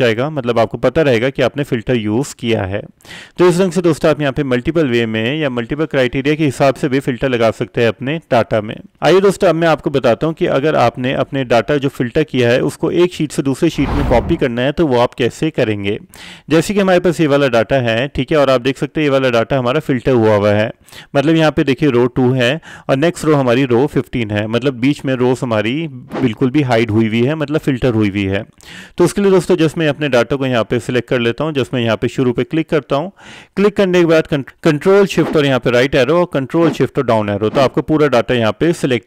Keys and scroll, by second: 35.4 ctrl+c, 37.7 ctrl+shift+Down.